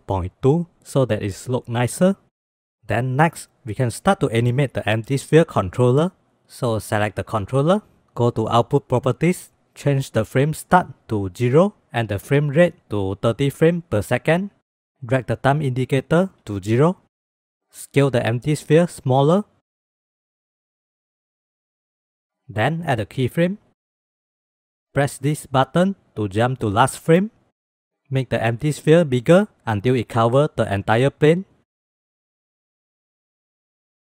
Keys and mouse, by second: 1.8 ctrl+s, 10.5-11.8 drag, 12.3-14.3 drag, 15.8 drag, 18.3 s, 19.9-22.3 drag, 23.2-24.2 drag, 27.8 s, 29.1 s, 30.5 s, 32.1 click, 33.3 KP_0.